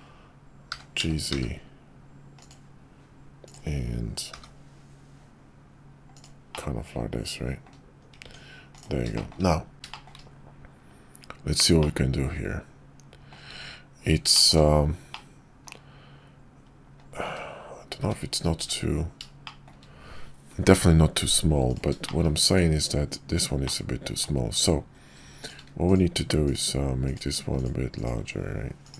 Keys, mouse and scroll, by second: 0.7 g, 4.3 g, 6.6-7.7 drag, 8.2 Tab, 9.1 shift+click, 9.7 `, 9.9 shift+drag, 11.8-13.3 drag, 14.3 shift+middle click, 15.1-15.6 middle drag, 18.0 `, 18.5 `, 19.4 shift+middle click, 21.7 click, 22.0 shift+middle click, 22.4 Tab, 23.6 click, 25.4 alt+click.